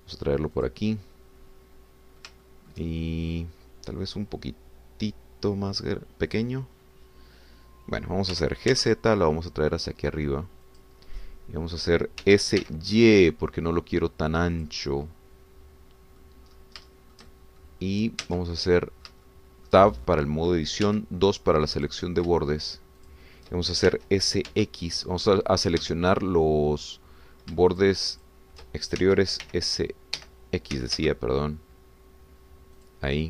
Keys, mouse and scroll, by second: 0.0 shift+z, 1.5 click, 1.9-4.5 middle drag, 9.3 g, 9.7 z, 11.7 click, 12.2 middle click, 13.2 s, 13.6 y, 15.6-17.4 drag, 15.8-17.4 middle drag, 17.5 scroll up 1, 17.9 shift+middle click, 18.8 shift+scroll up 1, 19.3 Tab, 19.6 middle click, 20.3 shift+middle click, 21.8 2, 22.8 click, 24.0 shift+click, 24.9 shift+s, 25.5 x, 26.8 Escape, 28.7 shift+click, 29.2 shift+click, 30.0 shift+s, 30.4 y, 31.2 Escape, 31.8 s, 32.0 x.